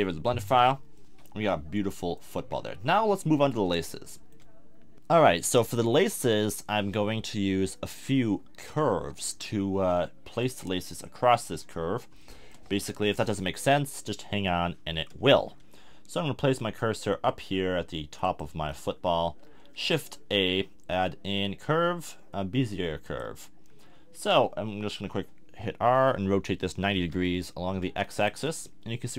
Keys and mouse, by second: 0.0-0.5 drag, 0.0 l, 0.5-1.8 middle drag, 2.4 KP_1, 2.9-3.9 middle drag, 8.9 KP_1, 18.6 middle click, 18.7 click, 18.8-19.5 middle drag, 19.5 click, 20.1 shift+a, 23.7-25.8 middle drag, 25.8 r, 28.2-29.1 drag.